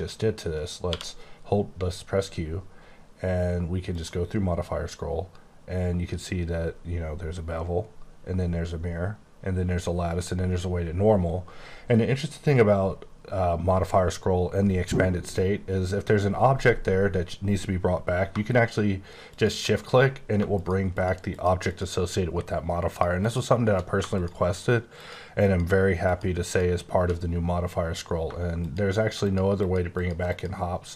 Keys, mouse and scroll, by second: 0.8 q, 3.9 click, 4.7-5.5 scroll up 5, 5.5 scroll down 5, 7.6 scroll, 7.8-9.1 scroll up 2, 9.1-9.5 scroll up 1, 10.0-12.0 scroll up 2, 19.3 click, 20.9 shift+click, 21.3 shift+click, 21.7 shift+click, 22.9 shift+click, 23.2 shift+click, 24.1 click, 24.5 click, 25.0 click, 26.0 click, 27.1 click, 28.6 click, 29.6 click, 29.9 click, 30.3 click.